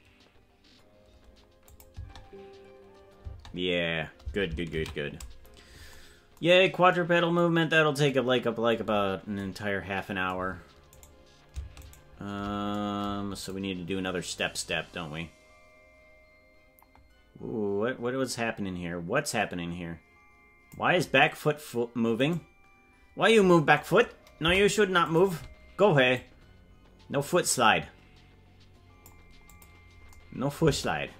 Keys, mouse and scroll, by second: 1.7 click, 1.9 space, 7.3 ctrl+s, 8.9-9.4 scroll up 5, 11.2 right drag, 12.1 shift+right click, 13.5-20.9 drag, 24.4 Delete, 26.2-29.2 drag, 29.5 click, 30.6 space.